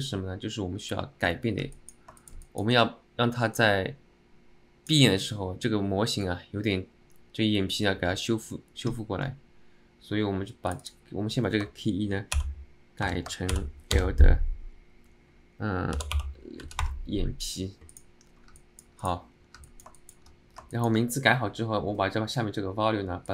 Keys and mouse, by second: 1.8 alt+middle click, 2.3 alt+shift+middle click, 2.6 alt+middle click, 3.8-5.1 drag, 10.8-17.7 drag, 18.0 click, 18.7 alt+middle drag, 19.1 click, 19.7 alt+middle drag, 20.1 alt+shift+middle drag, 20.8 alt+shift+middle drag.